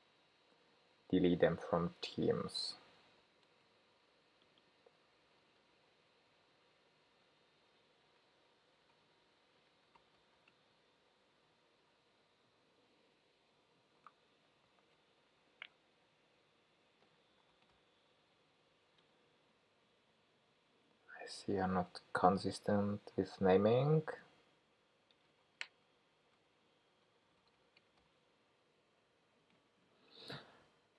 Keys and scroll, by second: 5.2 super+c, 7.1 super+v, 19.0 Return, 22.8 alt+shift+Right, 25.8 ctrl+g.